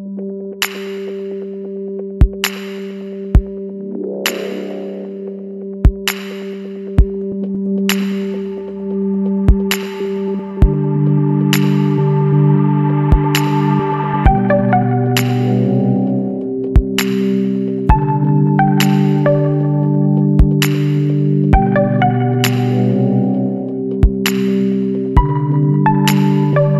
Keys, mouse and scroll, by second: 1.4 click, 4.1-6.2 middle drag, 4.3-6.2 drag, 9.1 click, 11.7 click, 14.7 click, 17.4 click, 18.2 click, 18.9 ctrl+click, 22.3 click, 24.3 click, 25.7 ctrl+click.